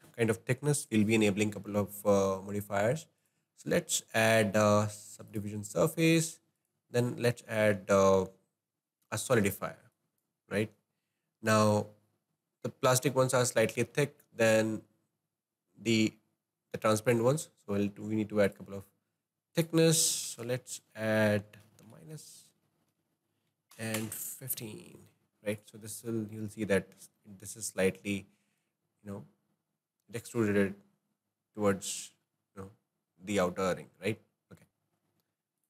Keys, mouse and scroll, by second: 3.2-12.1 drag, 13.4-14.1 scroll up 3, 14.1-17.1 shift+middle drag, 18.6-22.4 drag, 22.4 Right, 22.6 Right, 25.9-26.6 middle drag, 26.6-26.9 scroll down 1, 26.9-27.3 scroll up 1, 27.3-28.7 shift+middle drag, 28.7 scroll down 1, 29.0-31.9 scroll up 5, 31.9-33.5 scroll down 3, 33.5-34.7 middle drag, 34.7 ctrl+z.